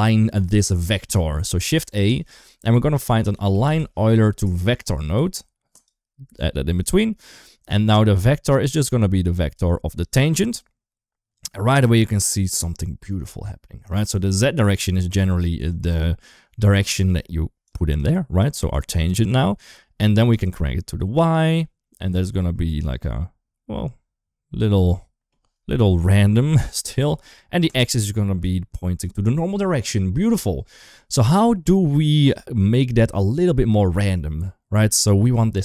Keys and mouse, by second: 1.4 shift+a, 6.7 shift+middle click, 8.4-9.4 drag, 14.4 click, 15.5 click, 15.7 click, 17.5 click, 17.7 click, 18.2 click, 20.1 click, 21.6-25.1 middle drag, 25.8 KP_1, 27.5 click, 28.4 shift+middle drag, 31.3-32.1 drag, 32.7 click, 32.9 click, 34.0 click, 35.0 click.